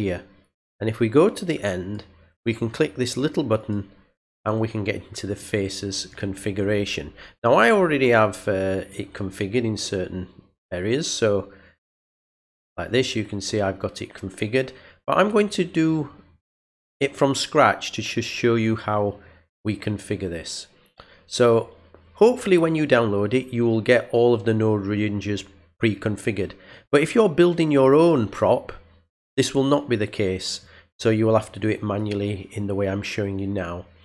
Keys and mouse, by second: 1.8 click, 3.6 click, 5.4 click, 8.8 click, 12.1 click.